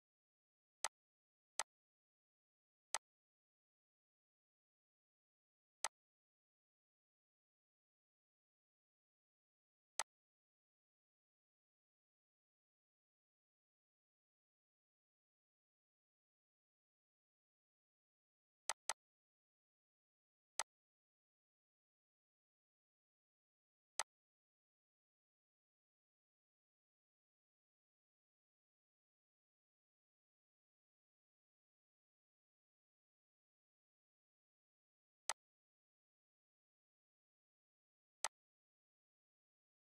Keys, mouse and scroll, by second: 0.8 click, 3.6 scroll, 9.9-18.5 drag, 18.7 click, 19.6 right click, 20.6 click, 23.9-34.0 drag, 24.2 typing, 33.0 typing, 35.3 click, 35.3 typing, 38.2-40.0 drag.